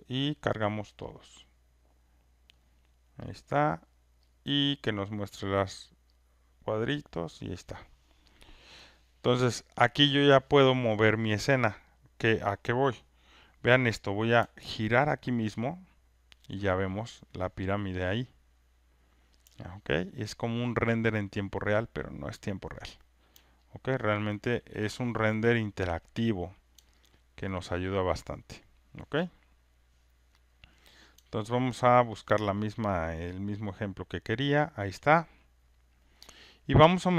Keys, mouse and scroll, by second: 0.0 click, 1.1 click, 3.3 click, 4.3 click, 5.1 click, 5.5 click, 6.2 click, 7.2 click, 16.3-17.7 alt+drag, 20.7 alt+click, 22.2 alt+click, 24.4 alt+click, 30.5 click, 32.5 click, 33.5 alt+right click, 34.7 alt+click.